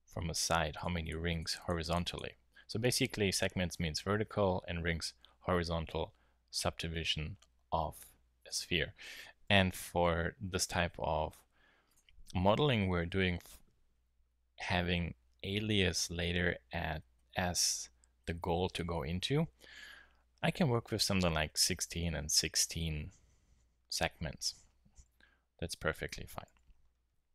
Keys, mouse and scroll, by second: 0.3-1.4 drag, 8.3-10.5 drag, 11.8-13.5 drag, 26.5 t.